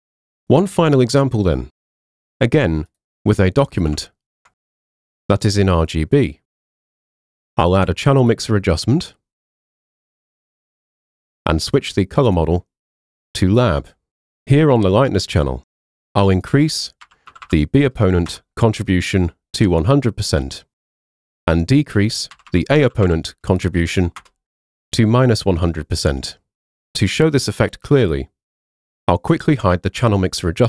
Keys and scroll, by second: 0.3 super+Tab, 1.3 Tab, 4.0 super+Tab, 4.8 super+Tab, 16.9-17.8 typing, 18.3 Return, 22.2-23.4 typing, 24.2 Return.